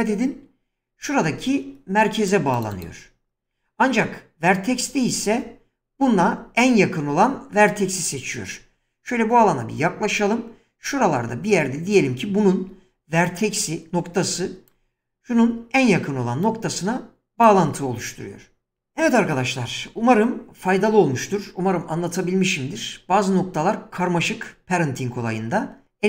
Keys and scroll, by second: 2.9 <, 10.0 <.